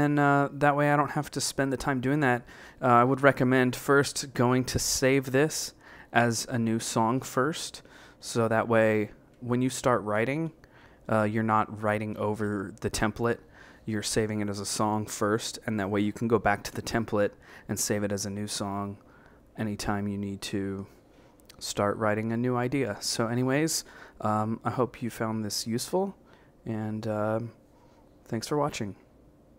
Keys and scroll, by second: 2.8 Up, 3.2 Down, 4.2 a, 4.6 Right, 5.0 a, 5.3 Down, 5.8 a, 6.7 Left, 6.9-10.9 typing, 8.5 Up, 9.0 Left, 9.8 Left, 10.3 Right, 10.7 Up, 11.1 Right, 11.6 Down, 12.0 a, 22.7 b.